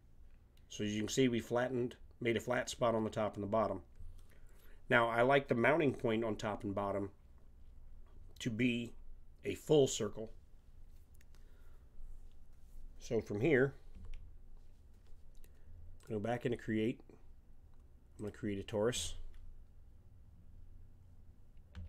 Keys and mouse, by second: 13.9 KP_7, 16.0-17.8 drag, 18.1-21.7 drag, 21.7 s.